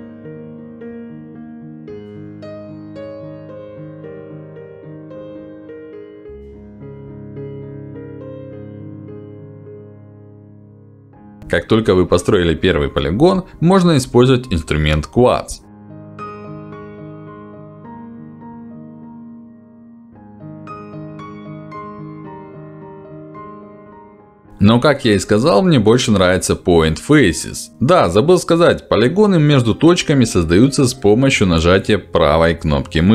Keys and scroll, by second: 13.8 f, 20.9 ctrl+z.